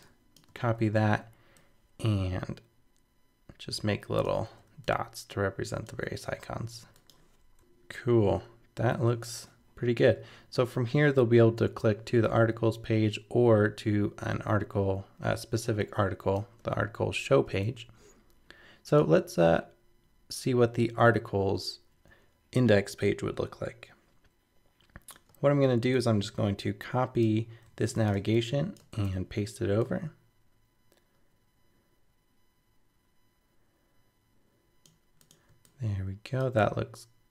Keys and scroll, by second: 6.2 super+d, 7.6 super+-, 27.6 super+c, 29.0 super+v.